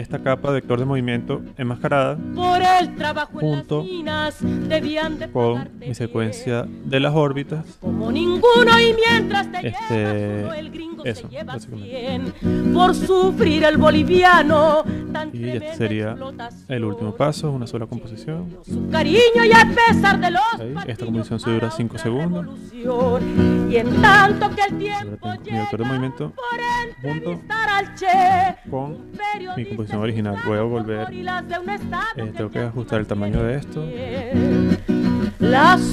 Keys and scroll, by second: 33.3 super+k.